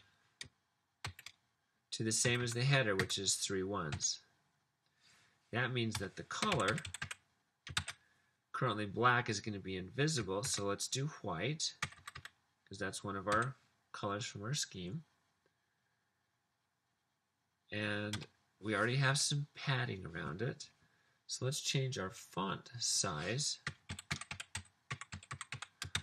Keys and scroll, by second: 0.8-8.3 typing, 6.1 Return, 10.6 typing, 11.9 typing, 14.3 typing, 18.2 Return, 23.8-25.8 typing.